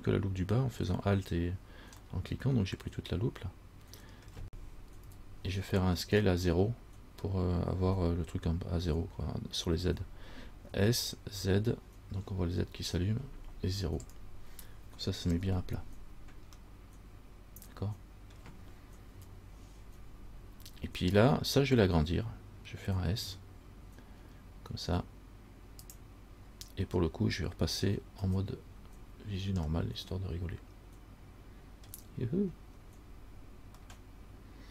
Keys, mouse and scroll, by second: 2.2 scroll up 1, 2.3 middle click, 4.1 middle click, 4.5-5.2 scroll down 1, 5.2 KP_1, 10.9 s, 16.9 middle click, 17.8 middle click, 19.3 KP_1, 23.4 s, 28.4 z, 29.9 scroll up 1, 30.0 middle click, 32.0 scroll down 1, 32.8-33.3 scroll down 3, 34.1 middle click.